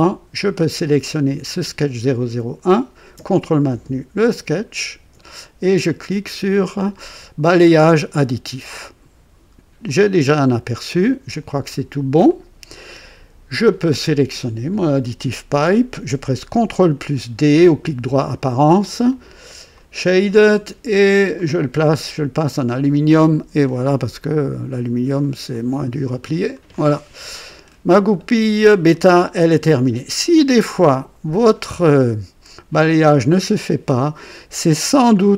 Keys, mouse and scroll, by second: 4.5 ctrl+click, 7.6 click, 9.8-11.1 drag, 12.2 click, 14.2 click, 17.8 ctrl+d, 19.0 click, 19.7 click, 20.4 click, 21.3 click, 22.3 click, 22.9 click, 23.6-25.3 drag, 25.5-27.9 drag, 28.8-30.0 drag.